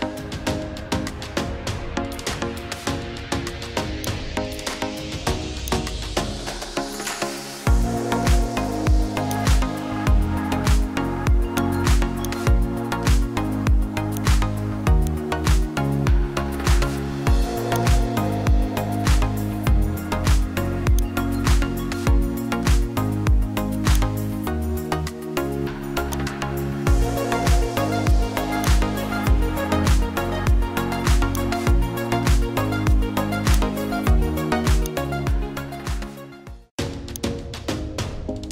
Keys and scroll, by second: 16.5 ctrl+d.